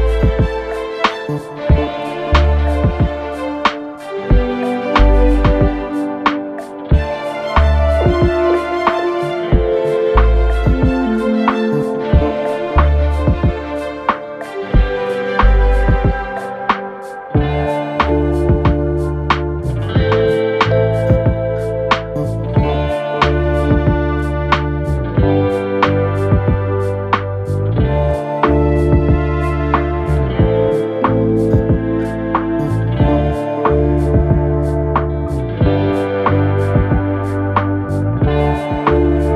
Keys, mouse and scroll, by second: 2.6-4.1 typing, 6.0 typing, 8.4-9.8 typing.